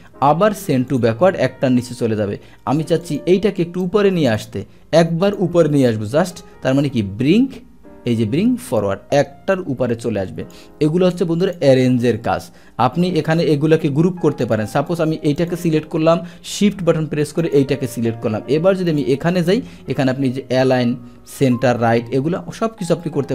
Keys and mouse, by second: 0.9 click, 3.0 click, 3.8 click, 5.2 click, 8.7 click, 9.5 click, 11.4 click, 14.4 click, 14.9 click, 15.4 click, 17.4 shift+click, 18.9 click.